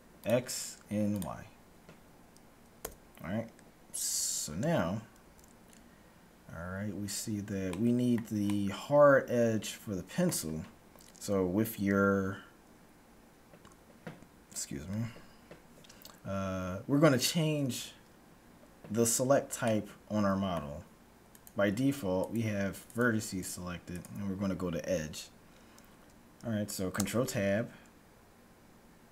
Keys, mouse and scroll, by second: 0.3-3.0 drag, 2.8 n, 5.2 KP_1, 7.8-10.0 middle drag, 19.8-21.2 middle drag, 21.2-25.7 right drag, 21.3 middle click, 27.0 ctrl+Tab.